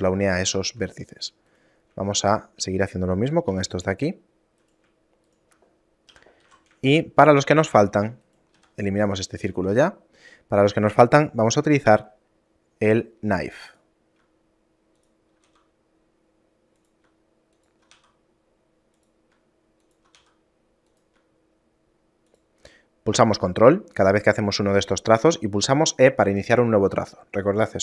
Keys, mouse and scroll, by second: 0.7 ctrl+Tab, 1.6 right click, 2.4 shift+right click, 3.6 j, 4.8 right click, 5.4 shift+right click, 6.3 j, 6.6 a, 7.1 shift+middle click, 8.1 Tab, 8.4 right click, 8.7 x, 9.5 right click, 9.7 Tab, 10.4 scroll up 1, 12.1 scroll up 1, 12.1 k.